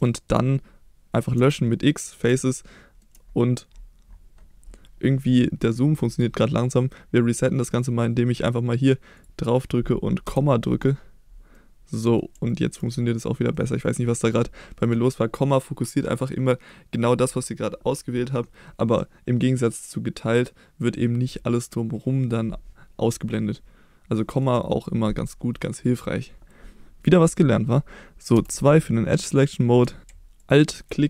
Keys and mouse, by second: 0.0 shift+middle click, 1.3 x, 2.4 middle click, 9.1 click, 10.2 KP_Decimal, 11.5 middle click, 12.4 shift+middle click, 13.5 middle click, 24.1 middle click, 28.3 2, 30.3 alt+click.